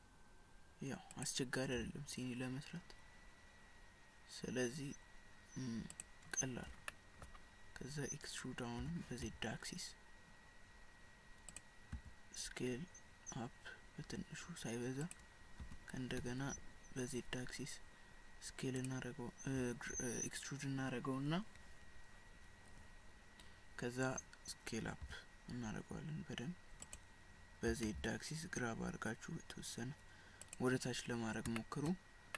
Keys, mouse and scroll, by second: 1.8 s, 6.9 shift+middle click, 8.8 e, 12.3 s, 15.6 e, 25.0 s, 27.7 g, 31.1-31.5 scroll down 2, 31.6 shift+middle click.